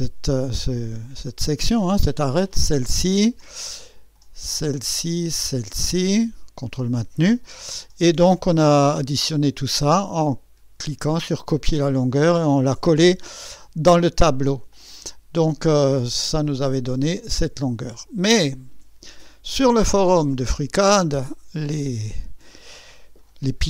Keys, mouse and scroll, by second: 2.5 ctrl+click, 4.7 ctrl+click, 6.0 ctrl+click, 14.7 click, 16.5 click, 21.8 click.